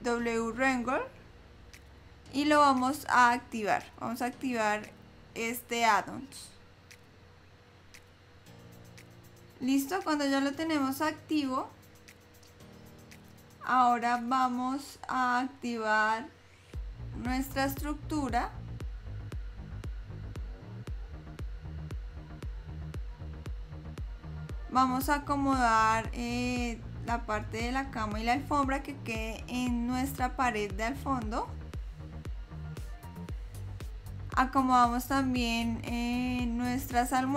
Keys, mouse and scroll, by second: 11.4-12.7 scroll down 1, 12.7 middle click, 14.1 scroll down 1, 14.8 middle click, 20.1 click, 23.0 shift+click, 23.0 shift+click, 25.2 shift+click, 27.2 click, 36.2 click.